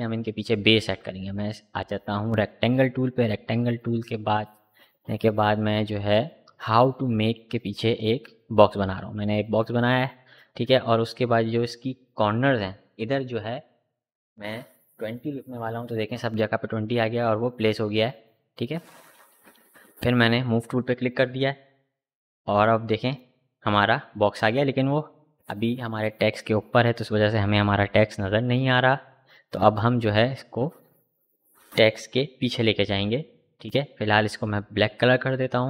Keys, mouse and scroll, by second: 2.4 click, 4.5-9.9 drag, 10.7-14.5 drag, 15.1 click, 19.1 click, 32.2-35.0 drag.